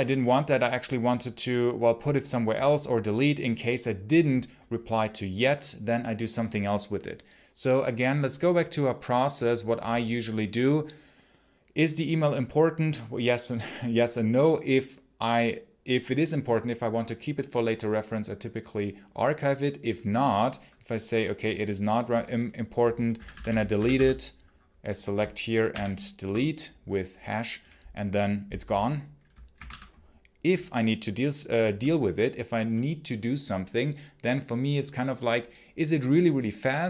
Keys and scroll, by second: 23.0-24.3 typing, 25.5 shift+3, 29.1-30.0 typing.